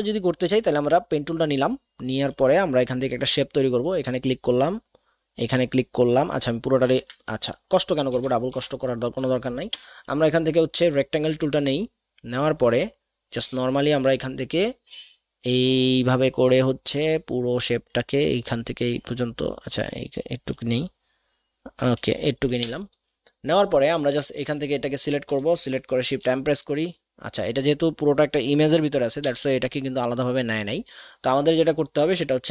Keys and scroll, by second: 8.1 BackSpace, 8.5 BackSpace, 9.7 v, 22.7 v, 26.0 shift+m, 29.3 v.